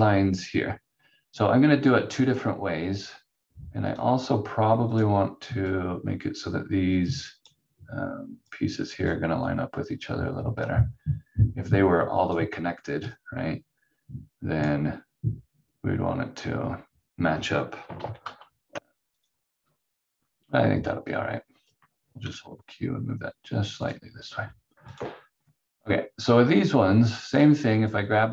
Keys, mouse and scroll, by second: 3.8 click, 18.0 ctrl+z, 18.2 ctrl+z, 19.2 click, 27.3 click.